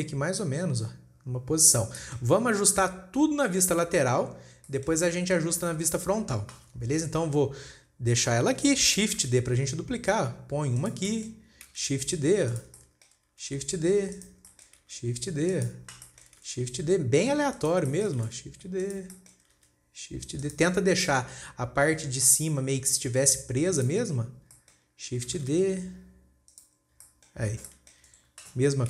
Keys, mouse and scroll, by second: 0.3 click, 2.4-3.2 shift+middle drag, 3.2-4.4 scroll down 3, 4.4-5.1 scroll down 1, 5.1-5.8 shift+middle drag, 5.8 scroll up 2, 6.1-7.4 shift+middle drag, 7.4-8.1 scroll down 1, 8.1 scroll up 2, 9.7 shift+d, 11.6-12.2 shift+middle drag, 12.2 shift+d, 13.2-13.9 shift+middle drag, 13.9 shift+d, 15.0-15.3 shift+middle drag, 15.3 shift+d, 16.5-16.9 shift+middle drag, 16.9 shift+d, 18.4-18.7 shift+middle drag, 18.7 shift+d, 19.6 shift+middle click, 20.1 shift+d, 21.2 scroll up 4, 21.5-21.9 shift+middle drag, 21.9 scroll up 4, 23.7 g, 24.5-25.0 scroll down 9, 25.0-25.8 shift+middle drag, 25.8 shift+d, 27.2 scroll down 2, 27.5-28.6 shift+middle drag, 28.6 scroll up 2.